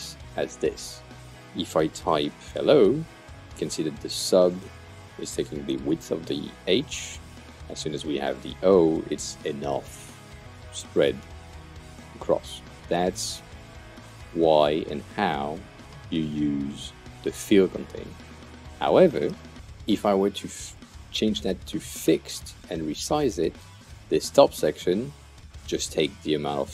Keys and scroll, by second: 1.8 Return, 2.3-3.5 typing, 6.8-8.1 typing.